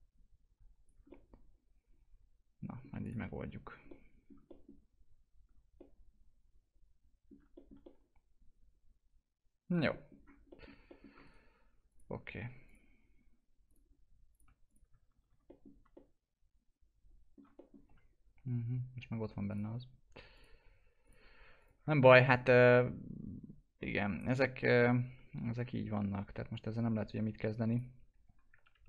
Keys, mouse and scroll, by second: 1.0 alt+middle click, 3.0 click, 3.3 F4, 3.5 scroll down 1, 4.1 alt+middle click, 4.9-5.5 scroll down 1, 5.7 alt+middle click, 7.8 alt+middle click, 10.4 alt+middle click, 11.2 right click, 11.9 click, 12.2-12.6 scroll down 1, 12.6 click, 14.6 ctrl+click, 15.0 alt+q, 15.4 middle click, 15.9-17.5 alt+middle drag, 17.5 middle click, 17.8 F4, 18.1 scroll up 1, 19.4 click, 21.8 alt+middle click, 22.8-24.2 alt+middle drag, 24.2 middle click, 25.9 typing, 27.7 click, 28.7 ctrl+BackSpace.